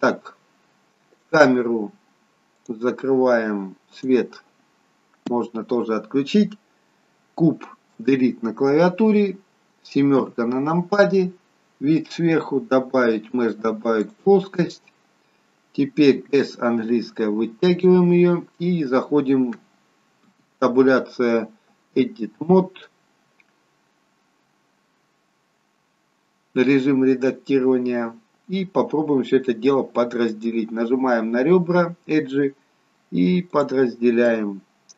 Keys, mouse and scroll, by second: 2.5 click, 8.0 Delete, 13.3 click, 16.3 s, 30.3 click.